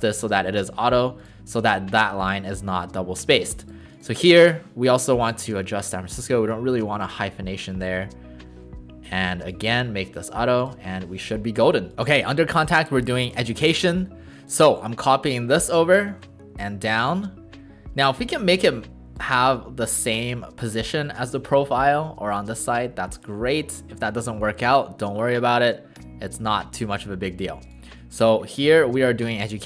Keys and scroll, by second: 8.0 Return.